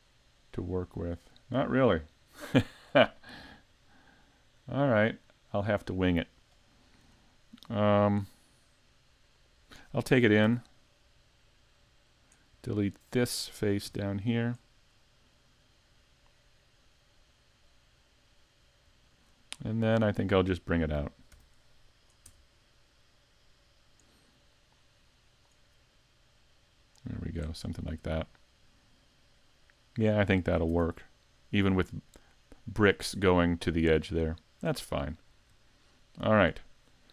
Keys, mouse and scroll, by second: 0.0 scroll down 4, 0.5 middle click, 1.4 scroll up 1, 1.8 middle click, 2.6-2.9 scroll up 2, 3.0 middle click, 3.6 middle click, 4.6 scroll down 2, 5.0 middle click, 6.9 scroll up 1, 7.2 shift+middle click, 7.9 scroll down 1, 8.3 middle click, 10.5 e, 12.2 click, 12.9 right click, 13.9 x, 15.0 middle click, 18.6-19.0 scroll up 2, 19.0 shift+middle click, 19.6 middle click, 20.1 right click, 21.3 p, 22.3 Tab, 22.7 right click, 24.5 click, 26.3 click, 27.7 middle click, 29.6 middle click, 30.4-30.8 scroll down 4, 30.7 Tab, 31.2 middle click, 33.4 scroll down 1, 33.8 middle click, 34.7 shift+middle click, 35.3-35.7 scroll down 1, 35.7 shift+middle click, 36.1-36.6 scroll up 1, 36.6 shift+middle click.